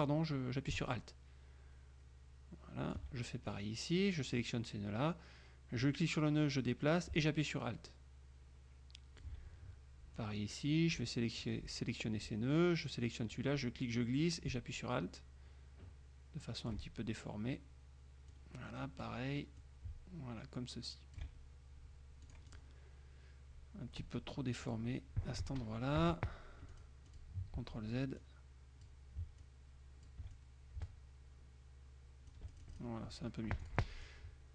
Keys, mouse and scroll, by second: 3.6-4.7 alt+drag, 6.0-9.5 drag, 10.3-11.7 drag, 13.5-17.0 drag, 18.4 click, 19.7-21.5 alt+drag, 22.4 click, 24.8 click, 26.1 F2, 26.9 click, 27.3 click, 27.7 ctrl+z, 28.3 ctrl+click, 29.6 alt+click, 30.5-33.1 alt+drag, 33.7 F1, 33.8 click, 34.2-34.5 drag.